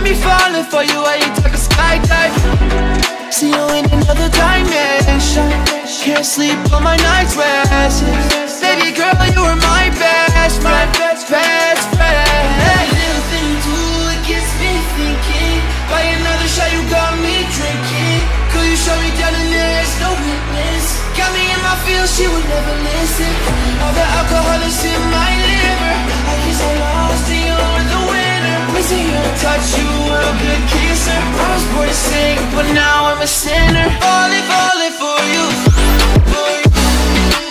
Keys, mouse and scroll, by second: 0.1-0.9 alt+scroll up 2, 1.0-1.4 alt+scroll down 2, 1.4-1.9 alt+scroll up 2, 1.9-3.4 scroll down 4, 3.4 click, 3.8-4.2 alt+scroll up 2, 4.2 b, 4.9-11.4 drag, 13.6 v, 14.1 alt+scroll down 1, 14.9 alt+scroll down 1, 15.3 alt+scroll up 1, 15.7 b, 16.3 click, 16.8 v, 17.1 alt+scroll down 1, 17.8 alt+scroll up 1, 18.1 scroll down 1, 19.2-19.6 alt+scroll up 1, 20.8 alt+scroll up 1, 22.3 scroll down 1, 22.9 click, 24.3 ], 24.5 ], 25.2-30.1 drag, 30.1-31.6 alt+drag, 31.6 v, 32.4 ctrl+j, 33.2 click, 34.9-37.5 drag.